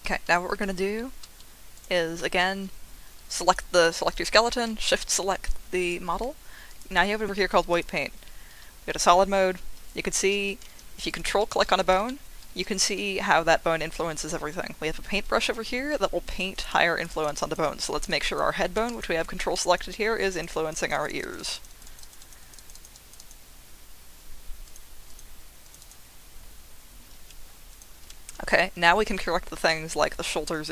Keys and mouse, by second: 3.4 click, 3.7 click, 4.2 click, 5.8-7.0 drag, 7.2 click, 8.1 z, 11.1 ctrl+click, 12.0 shift+middle click, 16.5 click, 16.7 click, 17.1 click, 17.3 click, 17.6 click, 18.2 click, 18.9 ctrl+click, 19.7 click, 19.8 click, 20.3 click, 20.6 click, 21.1 click, 21.6 click, 21.8 click, 22.0 click, 22.3 click, 22.5 click, 22.9 click, 23.2 click, 24.6 click, 25.1 click, 25.6 click, 25.8 click, 27.7 ctrl+click, 28.5 ctrl+click.